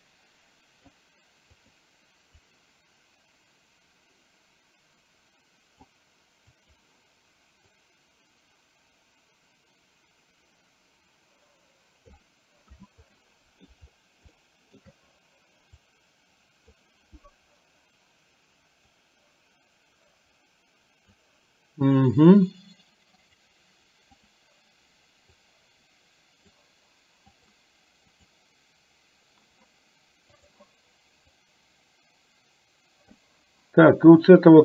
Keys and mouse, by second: 2.6-5.9 drag, 6.6 click, 7.9-12.3 drag, 13.1 middle click, 14.5 shift+middle click, 16.0 click, 18.9-21.1 drag, 25.5 click, 27.4 click, 31.5-33.3 drag.